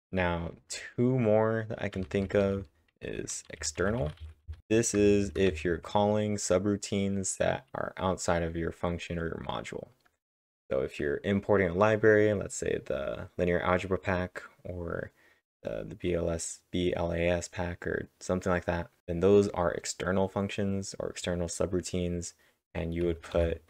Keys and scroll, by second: 1.9-2.6 typing, 4.3-6.5 typing.